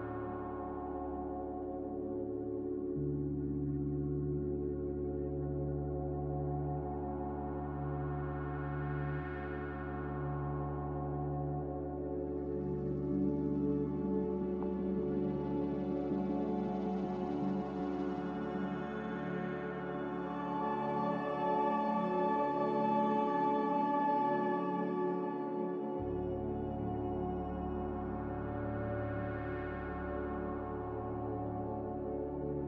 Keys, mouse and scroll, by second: 5.9 a, 12.8 typing, 14.6-15.3 typing, 17.9-21.6 typing.